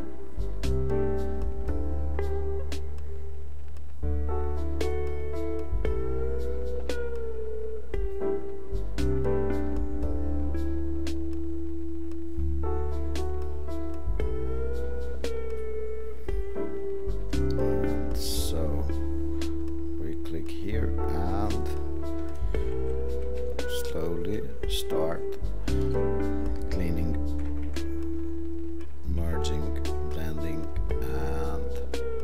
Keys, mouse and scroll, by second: 22.7 ctrl+-, 23.1 ctrl+-, 23.5 ctrl+-.